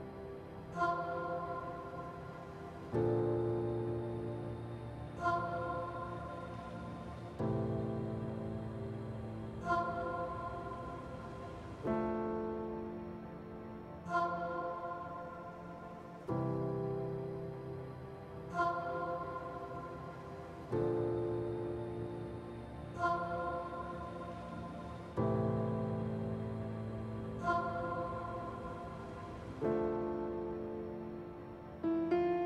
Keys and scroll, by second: 1.1 ctrl+z, 5.4 z, 6.5-8.1 typing, 9.6 s, 10.5 s, 10.6 ctrl+z, 14.7 z, 18.6 alt+x, 19.0 s, 20.4 s, 21.0 s, 22.2 s, 23.0 s, 27.2 s, 32.0 z.